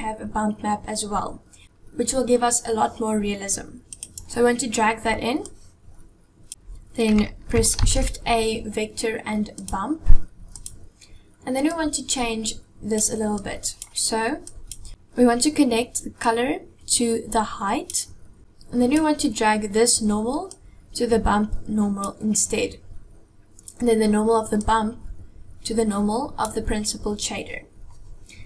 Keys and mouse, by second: 7.5 shift+a, 11.7-12.8 drag, 13.0-13.6 drag, 14.1-14.5 drag, 16.0-17.7 drag, 18.4 click, 20.2-21.8 drag, 24.3-26.2 drag.